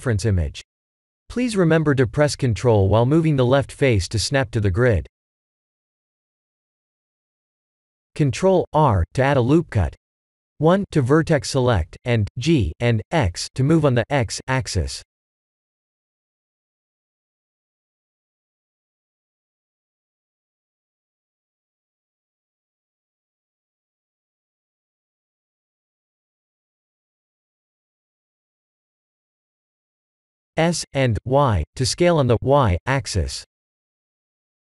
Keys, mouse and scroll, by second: 0.7 click, 0.7 3, 1.4 g, 6.4 click, 7.1 g, 10.3 ctrl+r, 13.8 1, 14.2 click, 14.6 b, 15.7 g, 18.1 click, 18.9 g, 21.4 click, 21.6 b, 22.7 click, 23.3 g, 25.8 click, 26.0 b, 27.2 g, 29.9 Tab, 30.4 middle click, 31.9 s.